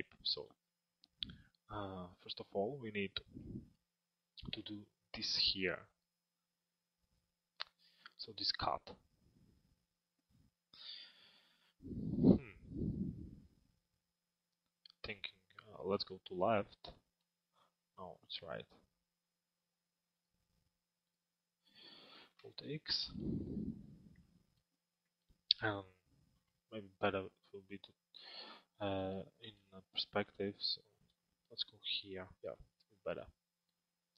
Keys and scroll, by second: 15.5 l, 21.9 alt+x, 28.3 alt+x.